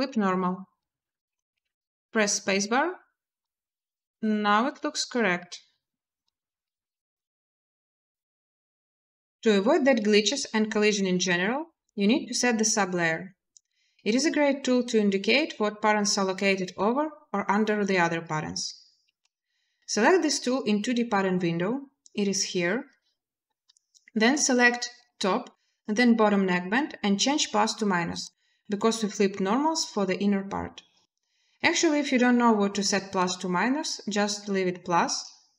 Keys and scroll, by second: 1.4 space, 10.6 space, 18.8 space, 34.8 space.